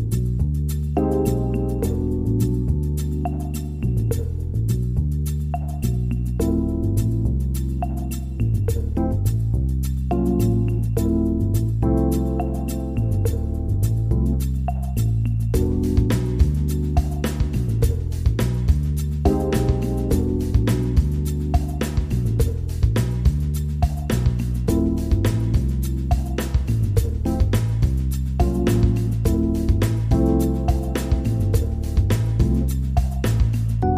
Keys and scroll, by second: 0.8 ctrl+0, 3.8 ctrl+0, 32.0 Up.